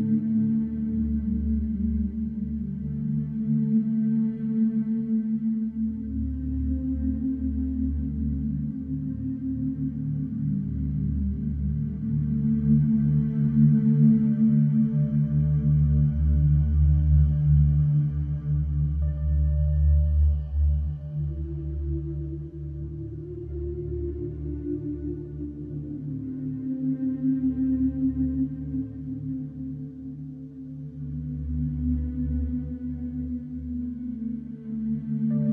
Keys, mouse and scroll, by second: 0.1-0.5 scroll, 0.6 click, 1.2 scroll, 2.9 scroll, 4.4 click, 6.4 click, 8.3 right click, 10.7 Escape, 12.8 click, 14.6 click, 15.3 click, 17.4 click, 18.8 click, 20.5 click, 21.4 click, 23.3 click, 24.5 click, 25.3 Escape, 27.2 click, 29.8 click, 32.2 click, 33.0 click, 34.1-35.0 typing, 35.1 Return.